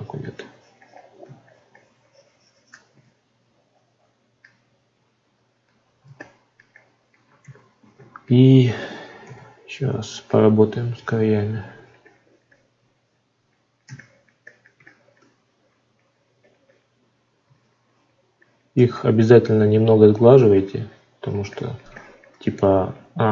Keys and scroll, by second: 7.4 ctrl+z.